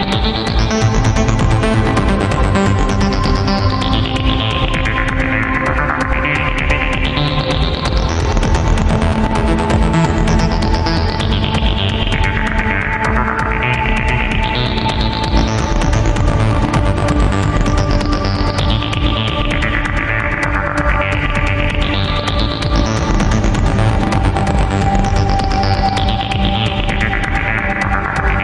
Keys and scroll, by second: 14.4 ctrl+z, 19.3 ctrl+z, 25.4 ctrl+z, 28.3 ctrl+z.